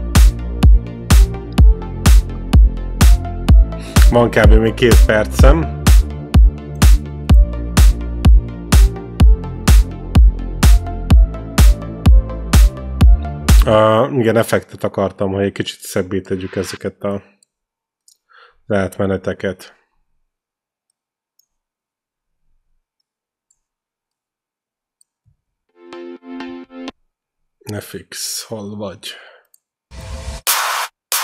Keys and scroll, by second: 7.1 ctrl+b, 13.5 space, 25.4 space.